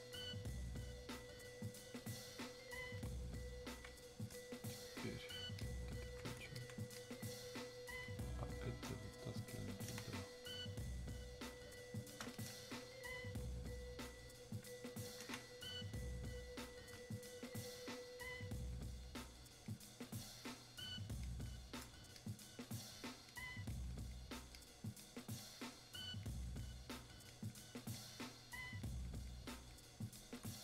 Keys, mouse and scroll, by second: 3.0-9.6 drag, 10.0 space, 10.8 click, 11.0 space, 12.3-15.3 drag, 15.3 space, 15.8 click, 15.8 space, 17.1-30.6 drag.